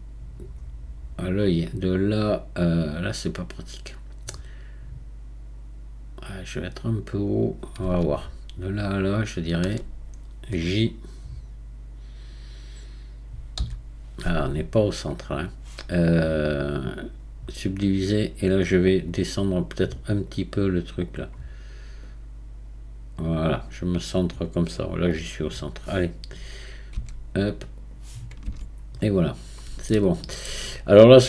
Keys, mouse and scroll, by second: 0.6-3.6 scroll down 1, 7.4 click, 9.3 shift+click, 13.6 j, 16.6-19.1 right drag, 19.1 click, 20.3 click, 21.1 click, 22.0-26.9 drag, 26.9 q, 28.4 Tab, 28.9-29.9 scroll down 8, 29.9-30.9 shift+middle drag, 30.9-31.2 scroll up 1.